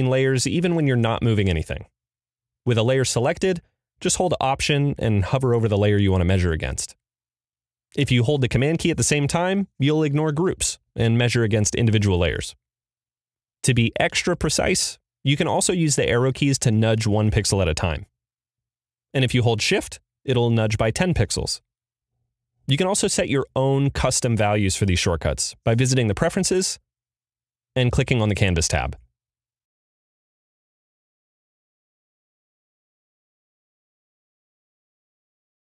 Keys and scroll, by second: 15.5 Up, 16.1 Down, 16.6 Left, 17.2 Right.